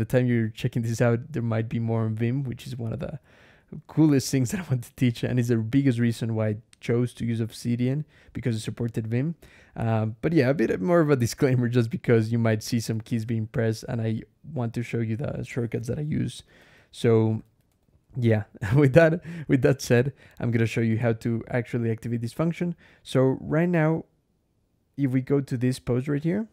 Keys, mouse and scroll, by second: 0.2 Escape, 0.7-1.6 typing, 2.7 k, 4.2 j, 4.6 k, 5.5 Escape, 5.8-6.7 typing, 8.8 k, 9.1 j, 10.0 j, 12.5 click, 12.7 Escape, 12.9 k, 16.4 ctrl+e, 16.7 ctrl+Escape, 17.2 ctrl+e, 17.5 ctrl+Escape, 17.7 ctrl+k, 18.9 j, 19.2 k, 20.9 ctrl+e.